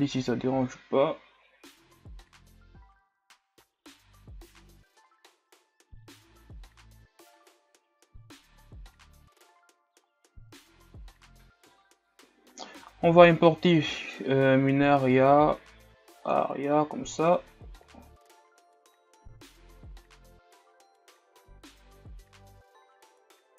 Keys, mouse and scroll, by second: 2.4 middle click, 2.6 scroll up 1, 3.0 click, 4.2 KP_1, 4.5 scroll down 4, 4.7 a, 5.0 scroll up 8, 5.5 ctrl+scroll down 3, 5.6 right click, 6.0 click, 6.6 right click, 6.9 click, 7.6 scroll down 3, 7.7 middle click, 8.1 click, 8.6 KP_1, 9.0-9.4 scroll up 2, 9.4 scroll down 1, 9.6 middle click, 10.1 right click, 10.4 click, 10.9 KP_1, 11.1 scroll up 4, 11.3 scroll down 10, 11.8 KP_1, 18.0-19.0 drag, 19.0 r, 21.4-21.9 scroll down 2, 21.9 shift+scroll up 3, 23.3 click.